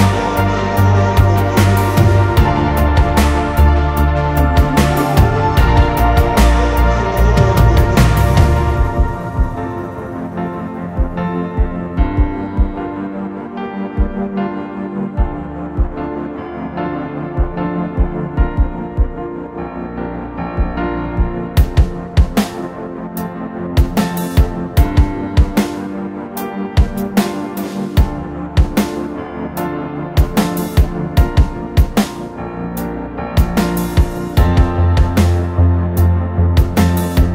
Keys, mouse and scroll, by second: 17.6-18.7 typing, 20.9-21.6 typing, 25.7 double click.